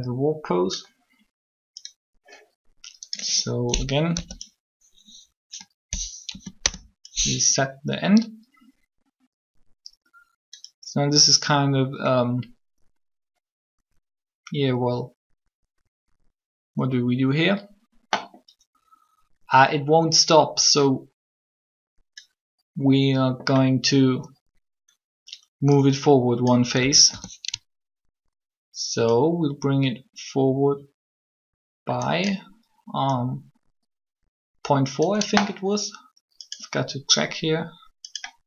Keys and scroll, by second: 4.1 b, 6.3 Delete, 6.3 Return, 26.7 a, 26.9 a, 28.8 typing.